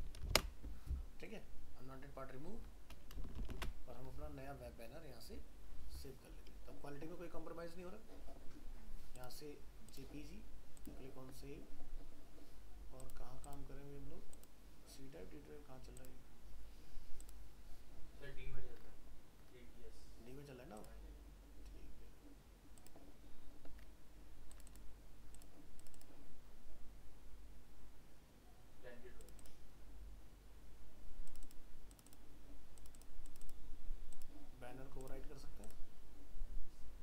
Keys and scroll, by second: 0.3 ctrl+alt+0, 3.5 ctrl+alt+shift+s.